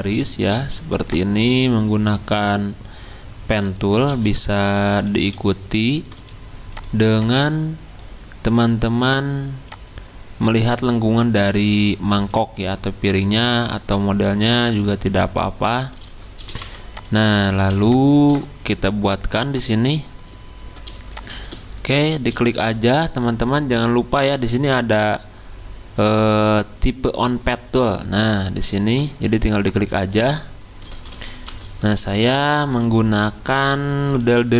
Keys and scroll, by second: 4.5-6.2 typing, 7.2-7.9 typing, 16.5 v, 31.3 ctrl+v, 34.2 ctrl+z.